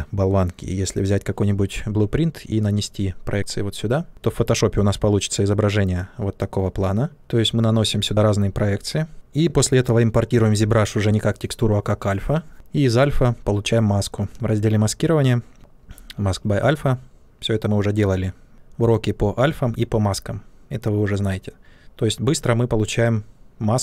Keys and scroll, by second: 7.2 ctrl+z.